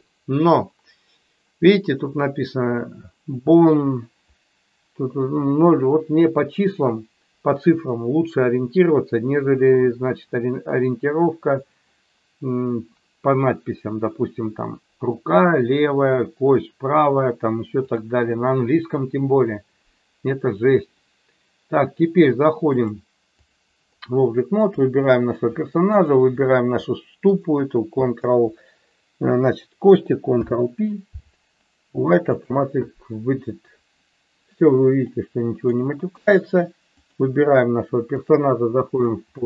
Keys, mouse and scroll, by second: 17.8 click, 22.7 click, 24.7 click, 26.0 shift+click, 27.3 shift+click, 30.3 ctrl+p, 35.1 middle click, 36.1 KP_1, 37.0 click, 38.2-39.2 drag.